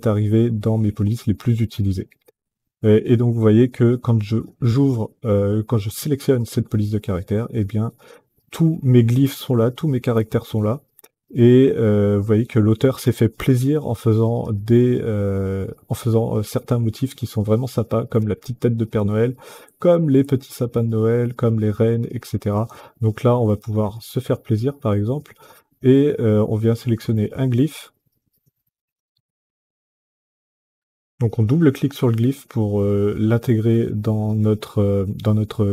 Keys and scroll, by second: 34.0 ctrl+z.